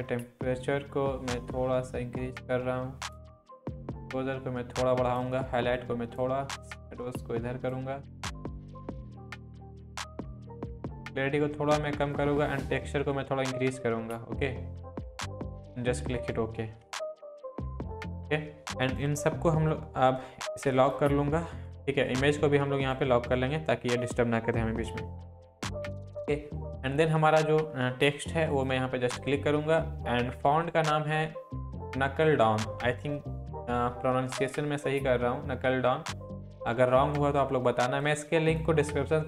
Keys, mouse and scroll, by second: 0.2-3.3 drag, 4.4-5.4 click, 9.8 click, 25.9 click, 25.9 click, 28.5 click, 28.5 click, 38.0 click, 38.0-38.6 drag.